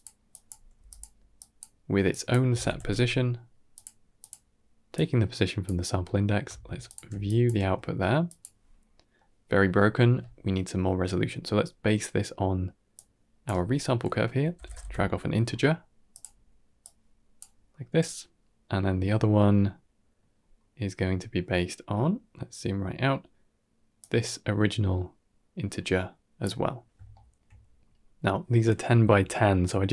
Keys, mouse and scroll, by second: 0.2 drag, 0.6 g, 1.3 click, 2.0-4.1 drag, 4.8-5.5 drag, 5.9 middle click, 6.7 alt+shift+click, 7.1 drag, 7.5 g, 8.7-9.0 middle drag, 11.1 scroll down 3, 11.4-11.9 middle drag, 12.8-16.1 drag, 16.7 click, 18.9-19.3 scroll down 3, 19.3 middle click, 20.2 scroll down 1, 20.4 middle click, 20.9-22.0 scroll down 5, 21.4 middle click, 22.0 middle click, 23.9-26.3 drag, 27.0 shift+middle click, 27.7 scroll up 2, 27.9 middle click, 28.5 middle click, 28.9 ctrl+middle click, 29.6 middle click.